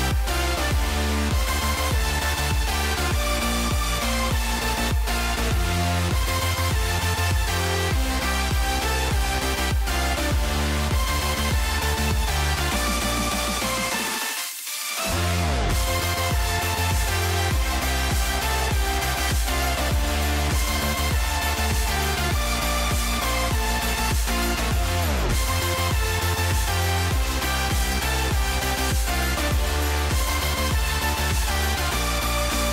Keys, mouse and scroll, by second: 0.5 click, 1.1-3.7 drag, 3.1 s, 4.2 click, 5.3 middle click, 6.0 middle click, 9.4 click, 9.7 middle click, 10.6 middle click, 11.1 middle click, 11.7 click, 12.2 middle click, 12.7 click, 15.2 middle click, 15.7-19.7 drag, 20.0-22.7 drag, 26.1 shift+middle click, 26.7 click, 28.2 click, 28.9-32.0 drag.